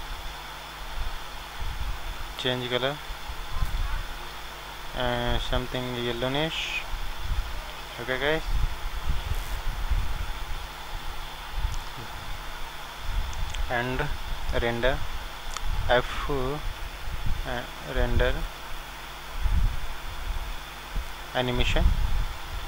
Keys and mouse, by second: 22.1 click.